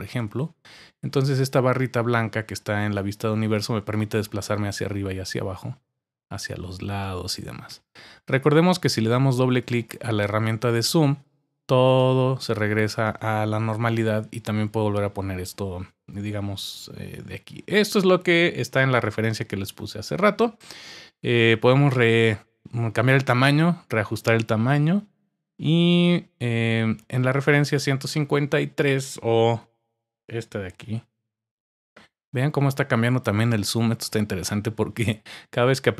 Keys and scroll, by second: 29.5 typing, 30.8-31.4 typing.